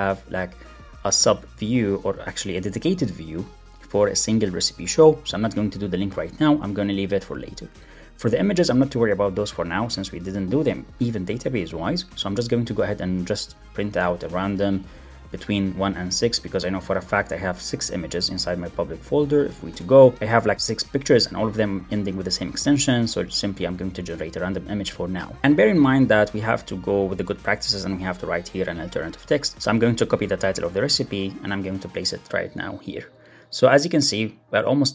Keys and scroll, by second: 5.5 Right, 5.8 shift+Left, 8.8 shift+Right, 16.7 super+s, 17.0 alt+super+l, 17.1 super+s, 18.3 shift+super+o, 19.6 Return, 22.4 ctrl+Tab, 23.9 alt+Up, 24.4 alt+Up, 27.4 alt+Up, 29.5 alt+Up, 30.3 super+c, 31.5 super+v, 32.1 super+1.